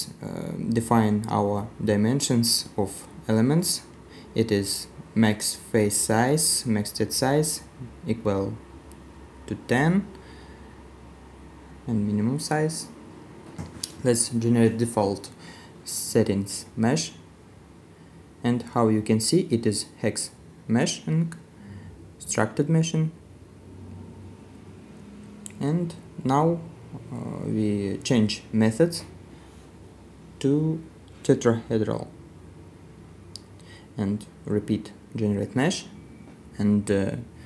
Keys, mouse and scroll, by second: 14.9 middle click, 14.9 right click, 19.2 middle click, 23.2 middle click, 26.7 middle click, 36.1 right click.